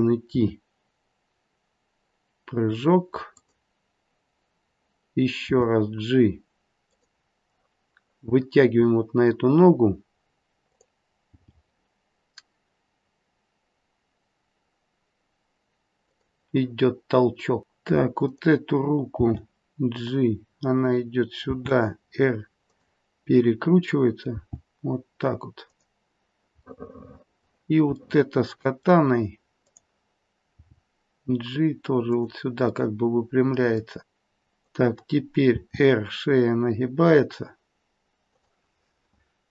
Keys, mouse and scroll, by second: 0.3 r, 5.4 g, 10.6 click, 11.3 g, 18.1 click, 19.1 g, 21.4 r, 24.3 g, 26.7 middle click, 27.9 middle click, 29.6 click, 30.5 g, 32.6 middle click, 33.7 middle click, 34.0 click, 34.5 click, 35.5 r.